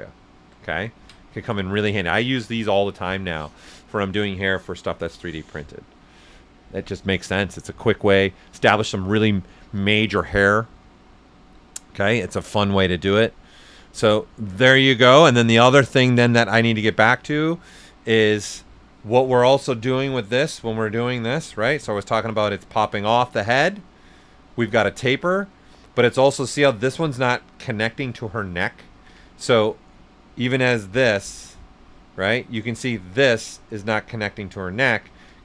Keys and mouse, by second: 0.2 alt+right click, 0.7 ctrl+right click, 13.1-16.7 drag, 17.3 right click, 19.7-21.8 drag, 21.8 ctrl+z, 22.1 s, 22.2 click, 23.1 shift+right click, 23.8 click, 24.7-28.9 right drag, 28.9 ctrl+z, 29.2 ctrl+right click, 29.4 right click, 30.5-32.1 drag, 32.1-34.9 right drag, 34.9 ctrl+z.